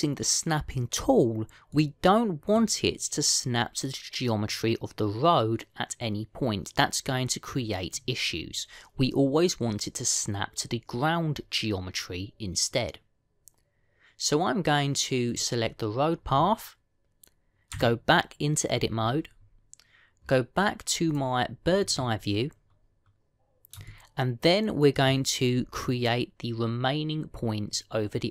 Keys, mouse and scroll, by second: 2.6 middle click, 16.1 click, 18.6 Tab, 21.9 click, 24.8 shift+middle click, 26.4-27.3 scroll up 2.